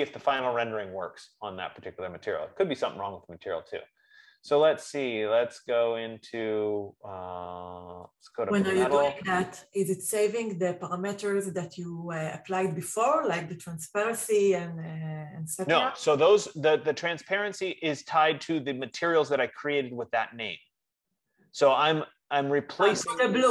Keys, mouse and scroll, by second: 1.6 click, 5.2 click, 8.5 click, 13.4 click, 14.8 F15, 19.4-23.5 drag.